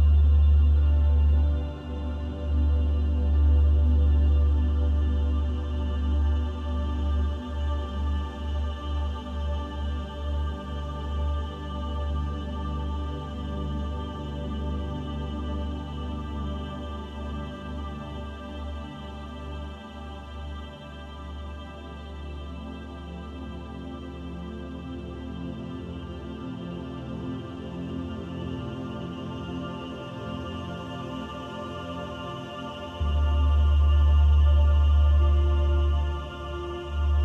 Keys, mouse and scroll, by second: 0.9 click, 2.7 click, 6.6 click, 11.2 scroll down 5, 12.2-12.8 scroll down 2, 12.8-13.3 scroll down 2, 14.2 scroll down 6, 14.2 scroll up 1, 15.1 scroll down 1, 15.9 scroll down 1, 17.1 scroll up 1, 17.7 click, 18.6 middle click, 19.7 click, 20.9 click, 24.2 click, 25.8 click, 28.8 click, 30.2 middle click, 31.0 click, 33.1 click, 36.3 click.